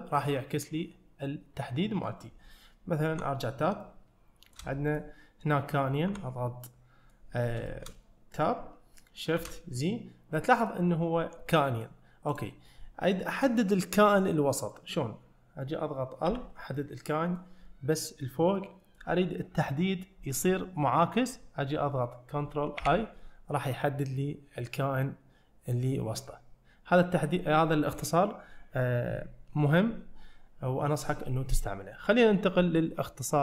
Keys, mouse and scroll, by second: 0.2-2.1 middle drag, 3.2 Tab, 3.9-4.6 shift+middle drag, 5.0 click, 6.1 Tab, 6.7-7.2 middle drag, 7.7 shift+middle click, 9.5 shift+z, 10.0 middle click, 11.6 middle click, 12.4-15.7 drag, 16.8 middle click, 18.6-19.0 middle drag, 22.8 ctrl+i, 26.3-27.3 middle drag.